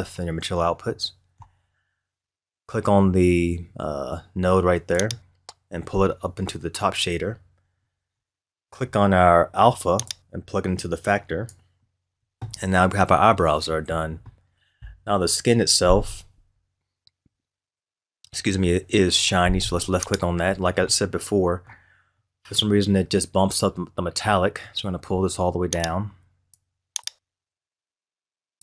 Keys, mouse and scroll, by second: 0.9-3.9 middle drag, 5.0 click, 8.1-10.1 middle drag, 10.1 drag, 12.6-13.5 scroll down 2, 13.5-13.8 scroll up 1, 20.1 click, 20.8-23.3 middle drag, 23.3-24.3 scroll up 2, 23.5-24.2 middle drag, 24.3-25.8 middle drag, 25.8-28.6 drag.